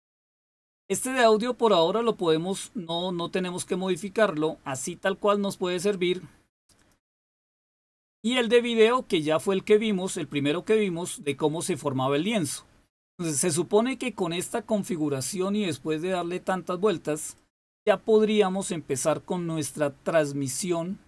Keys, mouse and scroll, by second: 6.7 click, 14.0 click, 17.3 click.